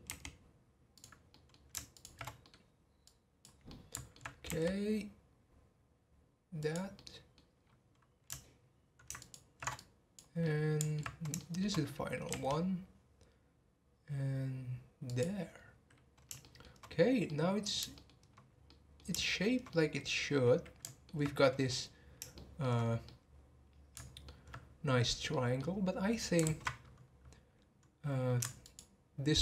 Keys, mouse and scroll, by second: 0.0 r, 1.3 middle click, 1.9 alt+shift+click, 2.4 middle click, 3.0 click, 3.7 middle click, 4.4 r, 6.9 middle click, 7.6-7.9 scroll down 2, 9.2 ctrl+alt+shift+click, 9.7 click, 10.4-12.3 middle drag, 12.3 r, 15.5 scroll down 1, 16.4-18.2 shift+middle drag, 18.2-18.7 scroll up 3, 18.7-22.8 middle drag, 22.8 scroll up 2, 23.0-26.1 middle drag, 26.1 scroll down 2, 26.4 ctrl+z, 26.8 scroll up 2, 28.6 ctrl+alt+shift+click.